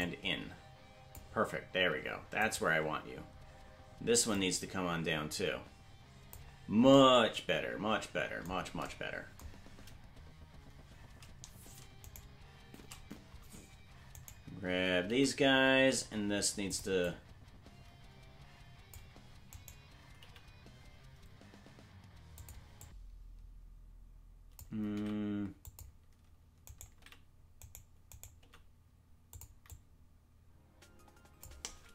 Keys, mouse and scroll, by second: 0.0-1.2 drag, 2.7 right click, 4.3-6.4 drag, 12.3 shift+right click, 15.1 right click, 15.1 g, 17.0-19.0 drag, 19.6 right click, 20.2 g, 22.8-24.6 drag, 24.9 g, 26.6 right click, 27.0 g, 27.6 right click, 28.4 g, 29.7-31.5 drag.